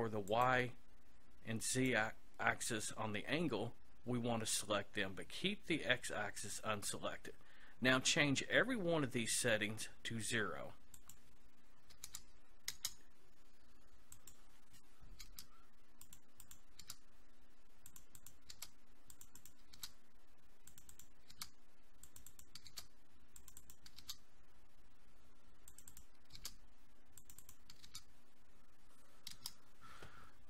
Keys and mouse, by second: 0.3-3.5 drag, 11.0-12.7 drag, 14.2-15.9 drag, 16.5-25.5 drag, 25.9-29.3 drag.